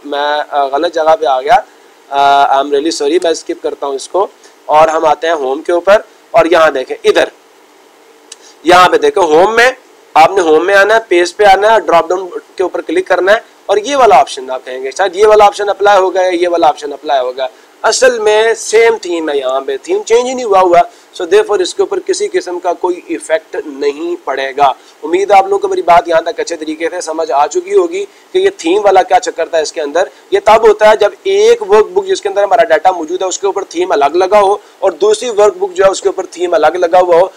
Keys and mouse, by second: 5.2-6.2 drag, 6.9-7.9 drag.